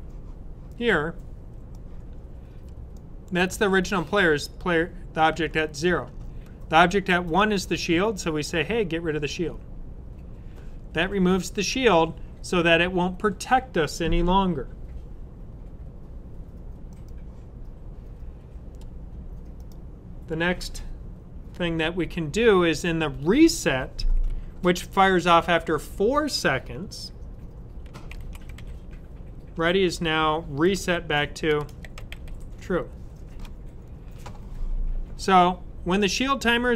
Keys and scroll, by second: 27.6-33.0 typing.